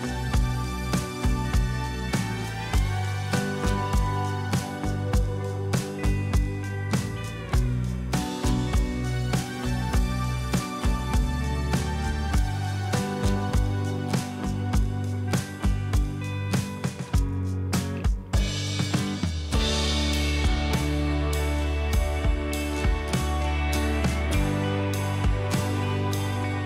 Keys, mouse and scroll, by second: 13.1 typing, 19.9 double click, 21.0 typing.